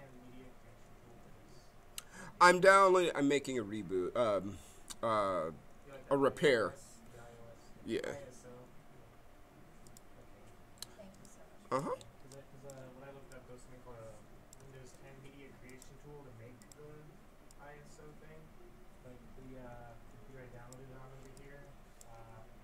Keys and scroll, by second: 14.7 ctrl+z.